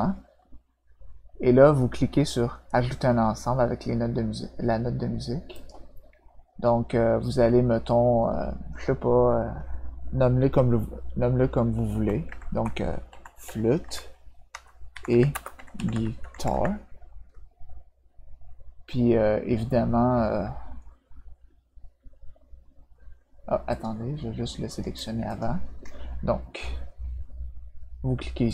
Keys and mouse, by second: 5.5 click, 12.8-16.5 typing, 23.7 click, 24.7 click, 25.2 shift+click, 28.4 click.